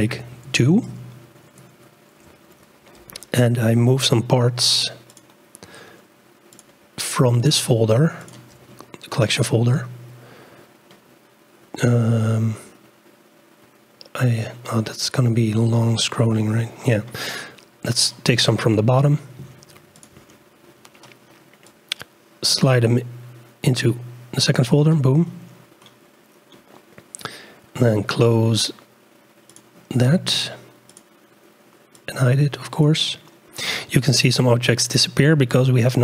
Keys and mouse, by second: 0.3-2.2 drag, 5.4 click, 6.5 click, 8.2 shift+click, 29.5 click, 30.9 click, 32.2-32.9 drag, 34.7-35.6 drag.